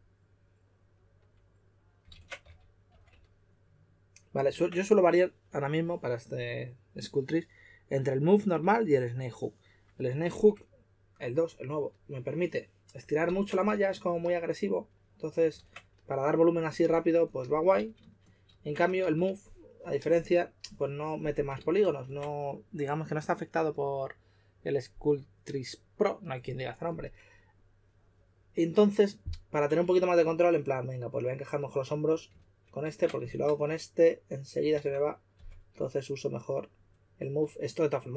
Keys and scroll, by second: 2.1 super+z, 2.4 s, 2.9 s, 4.5 super+z, 13.2 super+z, 13.6 s, 15.6 super+z, 17.7 super+z, 17.9 super+z, 18.4 super+z, 19.0 2, 21.6 super+z, 21.7 super+z, 29.8 2, 32.5 super+z, 32.8 super+z, 34.8 super+z, 35.3 2.